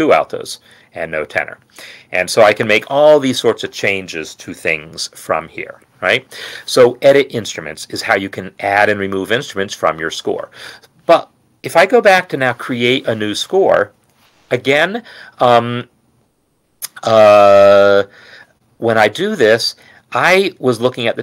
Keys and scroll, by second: 12.6 ctrl+n, 19.3 Return.